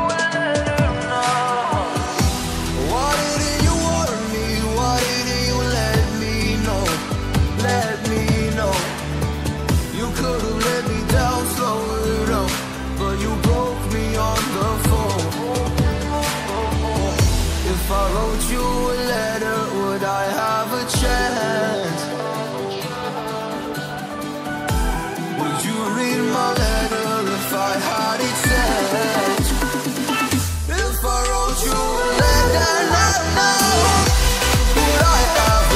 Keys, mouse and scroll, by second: 0.8 click, 7.0-7.3 scroll down 1, 7.3-7.8 scroll up 1, 7.8 click, 10.4-10.8 scroll down 1, 10.8-11.4 scroll up 1, 11.5 click, 11.6 double click, 12.0-12.7 scroll down 1, 12.7-13.4 scroll up 1, 13.5 click, 16.5 double click, 18.0 click, 19.4-19.9 scroll down 1, 20.1 scroll up 1, 20.7 click, 22.7-23.3 scroll down 1, 24.6 scroll up 1, 26.1 click, 26.2 double click, 28.9 click, 29.1 double click, 30.8 scroll down 1, 31.1-31.6 scroll up 1, 32.0 click, 35.6 scroll down 1.